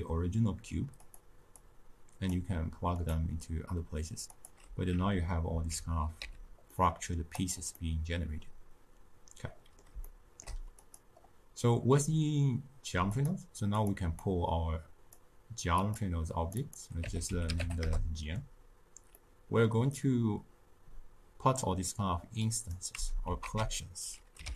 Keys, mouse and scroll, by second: 1.1 click, 1.7 click, 3.1 click, 4.4 click, 5.4 alt+z, 6.2 a, 6.7-7.5 middle drag, 7.5 click, 7.8-10.9 middle drag, 10.9 click, 13.2 click, 13.8 click, 14.2 click, 15.8 drag, 16.6-19.2 drag, 19.2-22.9 middle drag, 22.9 x.